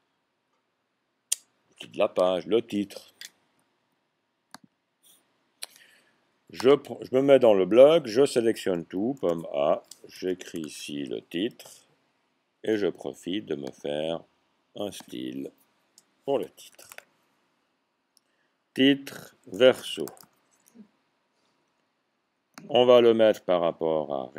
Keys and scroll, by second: 9.0 typing, 10.1-10.8 typing, 12.6 typing, 16.4-16.8 typing, 18.9-20.0 typing, 22.4-23.1 typing.